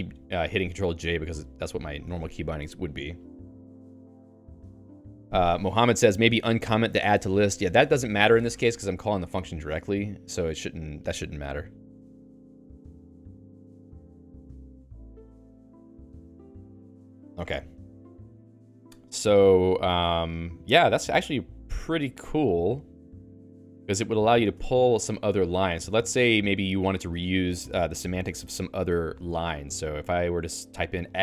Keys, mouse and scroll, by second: 0.0-1.0 typing, 1.4 Down, 1.8 Up, 2.0 Return, 21.0 Escape, 25.5 i, 30.8-31.2 typing.